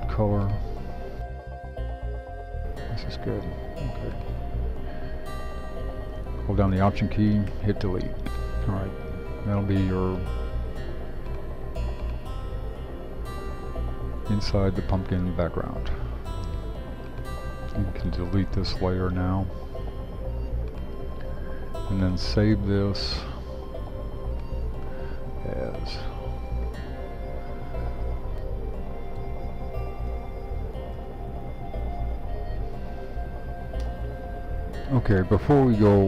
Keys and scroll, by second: 7.5 alt+BackSpace, 28.5-31.1 typing, 32.3 typing, 33.8 Return.